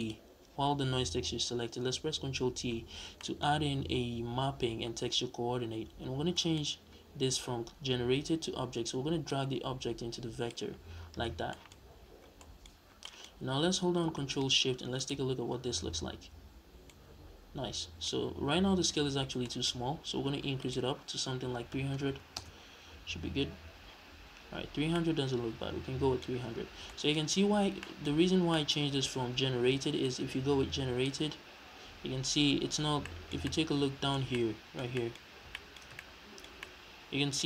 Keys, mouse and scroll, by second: 0.0 click, 2.6 ctrl+t, 2.9 scroll down 2, 3.2 middle click, 3.4-3.7 scroll up 2, 6.3 middle click, 9.3 click, 11.0-11.5 scroll down 2, 11.5 middle click, 11.8-12.4 scroll up 2, 12.4 middle click, 12.7-13.0 scroll up 1, 13.6-14.9 scroll down 1, 15.0 ctrl+shift+click, 16.9-20.6 middle drag, 19.0-19.4 scroll up 2, 20.1-20.6 scroll up 2, 20.6-24.9 drag, 22.1 KP_0, 22.4 Return, 24.9-30.1 middle drag, 26.7 scroll down 2, 27.2-27.6 scroll up 2, 27.6 scroll down 2, 28.1-28.5 scroll up 2, 28.8-30.1 scroll up 2, 30.1 click, 33.0-37.4 shift+middle drag.